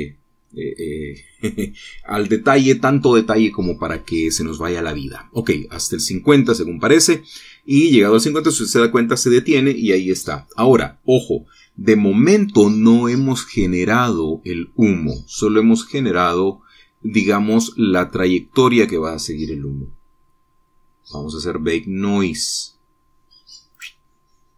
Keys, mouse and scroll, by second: 14.5-16.5 drag, 14.5-16.5 right drag, 19.1-20.3 middle drag, 20.7-22.1 scroll down 2.